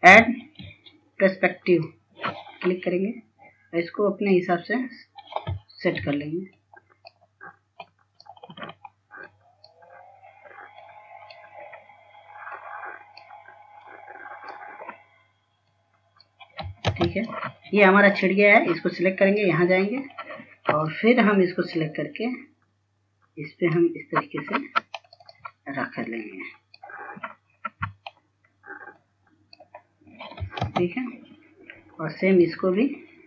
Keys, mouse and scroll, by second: 1.3 s, 2.9 click, 7.7-17.8 drag, 18.1 ctrl+space, 18.4 click, 21.3 scroll up 1, 22.1-25.7 drag, 25.7 scroll up 1, 26.3 click, 28.4 scroll down 1, 28.8-29.6 scroll up 1, 30.3 click, 31.2 scroll down 1, 32.0 ctrl+space, 32.4 scroll down 1, 32.9 scroll up 1.